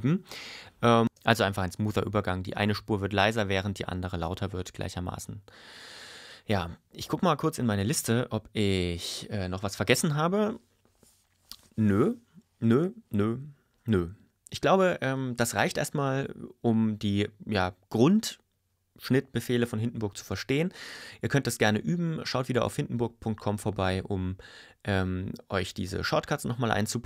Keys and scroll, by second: 1.0 space.